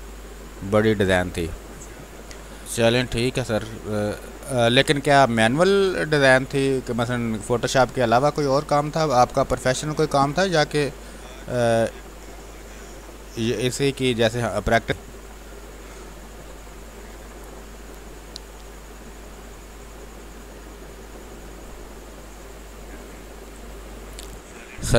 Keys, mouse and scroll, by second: 2.6-14.8 drag, 14.8 space, 14.9-22.9 drag, 22.9 space.